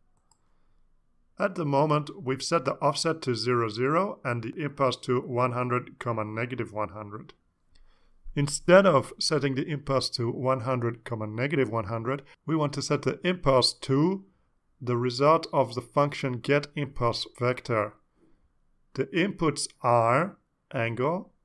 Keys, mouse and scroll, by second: 0.8 click, 2.2-4.7 drag, 5.3 scroll down 1, 8.2 scroll down 1, 11.7-13.9 drag, 14.5 ctrl+c, 15.9-18.1 drag, 18.6 ctrl+v, 19.7 scroll up 2, 20.5 scroll up 2, 21.1 scroll up 2.